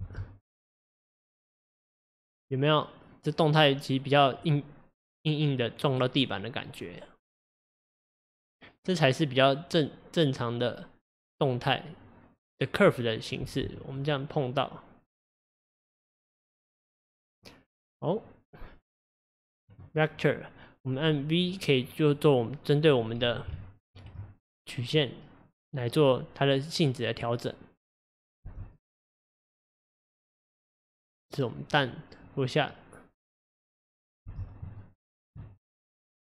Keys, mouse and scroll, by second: 0.0 space, 13.5 space, 14.0-17.0 drag, 21.9-28.4 drag, 28.4 space, 34.3 space, 34.8-36.2 shift+middle drag.